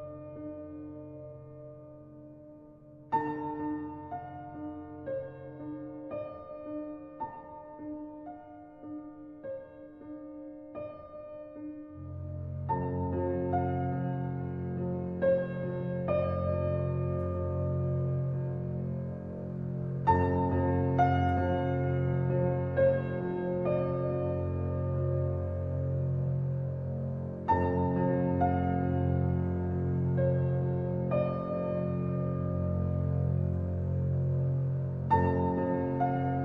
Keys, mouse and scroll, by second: 1.8 middle click, 2.3 Tab, 2.7-3.0 scroll up 2, 3.0-4.0 shift+middle drag, 4.0 ctrl+r, 7.0-7.3 scroll up 1, 7.3-8.5 shift+middle drag, 8.5 g, 12.2 ctrl+r, 16.1 s, 20.4 ctrl+r, 25.3 middle click, 25.9-26.5 scroll down 1, 26.5-28.2 middle drag, 28.2 Tab, 28.8-32.5 shift+middle drag, 33.1 click, 33.7 middle click, 34.4 click, 35.6 click.